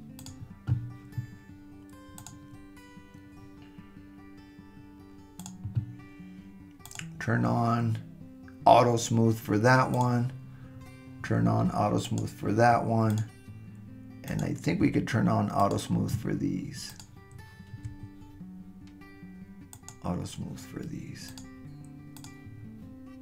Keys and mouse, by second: 2.2 click, 6.9 click, 12.1 click, 14.3 click, 15.6 shift+click, 16.9 shift+click, 19.7 click, 21.3 click, 22.2 click.